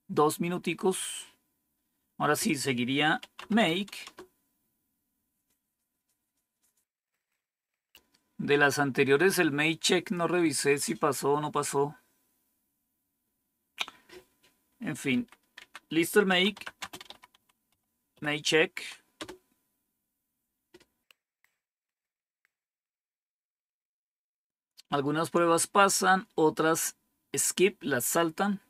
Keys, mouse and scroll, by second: 0.6-2.3 scroll down 1, 2.3 click, 2.9-4.1 typing, 15.1 Up, 15.5 Down, 16.0-19.1 typing.